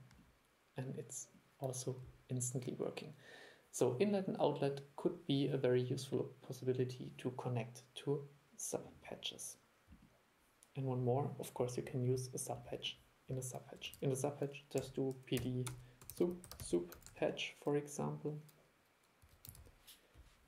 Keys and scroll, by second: 14.0 super+1.